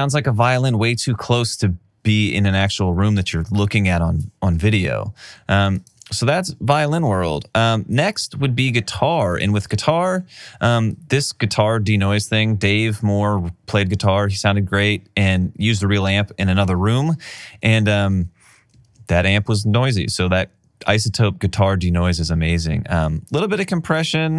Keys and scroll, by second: 6.5 alt+r, 6.6 alt+r, 6.8 alt+r, 7.3 super+s, 19.2 alt+super+w, 23.5 alt+super+w.